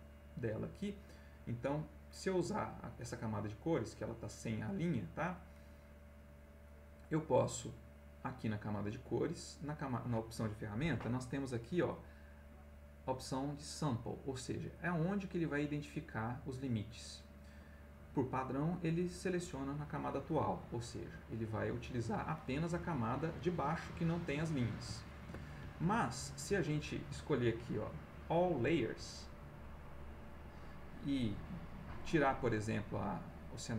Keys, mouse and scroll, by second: 1.5 click, 3.5 click, 5.3 click, 9.6 click, 13.3-13.8 drag, 19.5 click, 20.7-21.7 middle drag, 25.2 ctrl+z, 26.4-30.4 drag, 31.3 click.